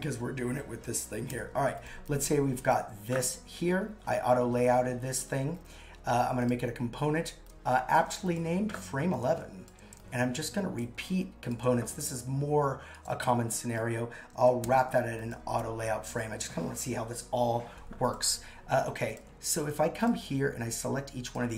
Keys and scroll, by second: 1.3 shift+a, 14.6 shift+a.